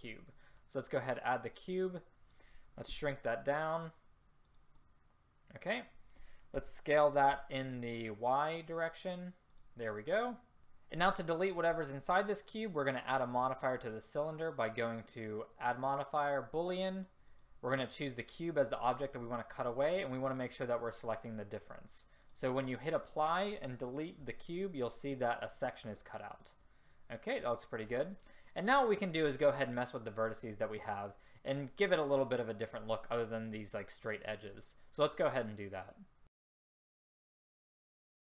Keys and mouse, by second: 3.0 s, 6.7 s, 17.4-19.7 drag, 23.1-24.3 middle drag, 24.3 Delete, 38.1 click.